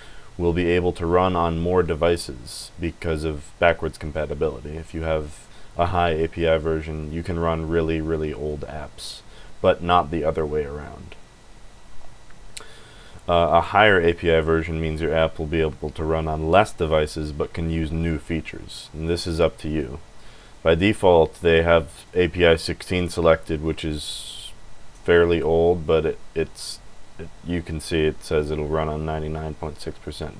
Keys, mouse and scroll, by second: 20.4 click, 21.9 click.